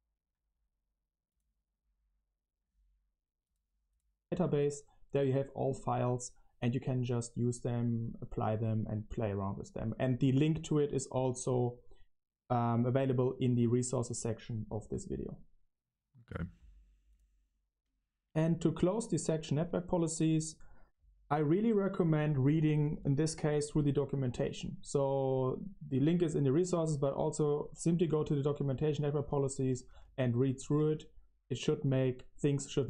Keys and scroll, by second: 18.9-23.4 typing, 28.9-32.8 typing.